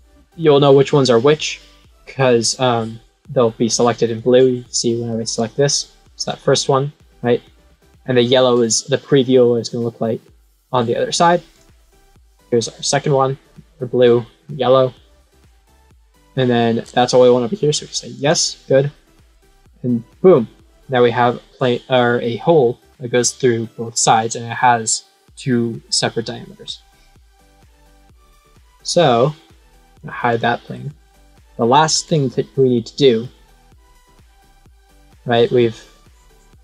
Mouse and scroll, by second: 5.2 click, 6.0 middle click, 7.8 middle click, 11.5 click, 12.5 middle click, 14.1 middle click, 15.1 middle click, 18.1 click, 27.3-29.8 right drag, 29.8 click, 30.2 click, 31.1-31.8 scroll up 1, 33.8 click.